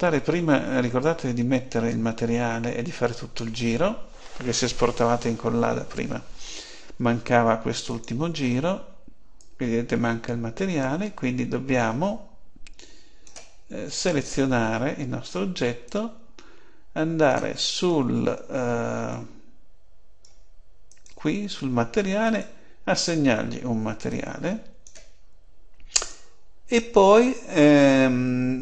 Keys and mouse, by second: 7.8-11.1 drag, 13.8-15.7 right drag, 15.8-17.7 drag, 19.0-20.8 middle drag, 20.8-23.9 drag, 25.6-27.8 drag.